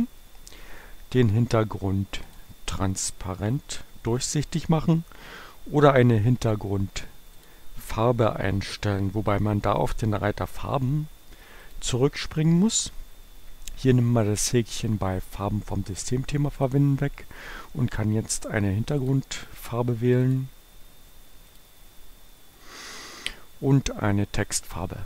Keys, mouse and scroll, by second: 2.2 click, 7.3 click, 11.7 click, 16.6 click, 19.1 click, 20.3 click, 21.6 click.